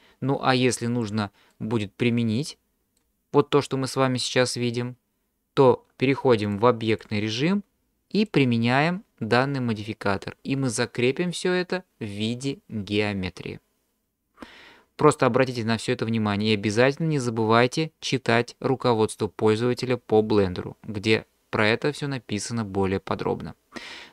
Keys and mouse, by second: 1.5-3.0 middle drag, 6.6 click, 8.2-10.2 drag.